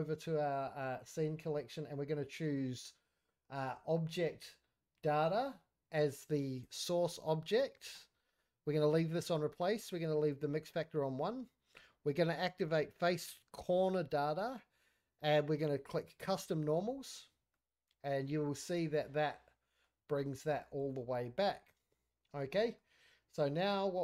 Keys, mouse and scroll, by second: 12.6 click, 13.8 click, 16.2 click, 17.2 scroll up 2, 17.5-19.8 middle drag, 19.9 scroll down 2, 20.2-20.5 middle drag, 20.6 scroll up 3, 21.0 shift+middle click, 21.1 shift+scroll down 3, 21.4-21.8 middle drag, 21.8 scroll up 1, 21.9-22.3 middle drag, 22.5 middle drag, 23.2 z.